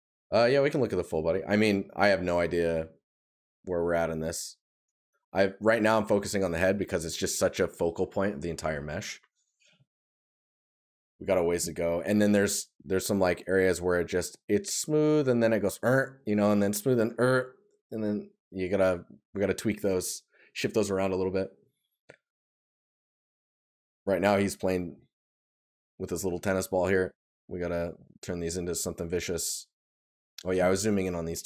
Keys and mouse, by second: 22.0 right click, 27.8 right click.